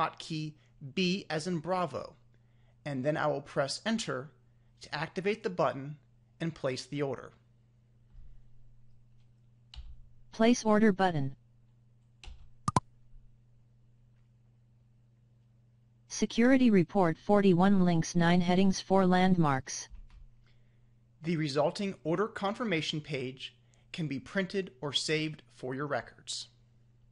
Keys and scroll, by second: 11.6 Return.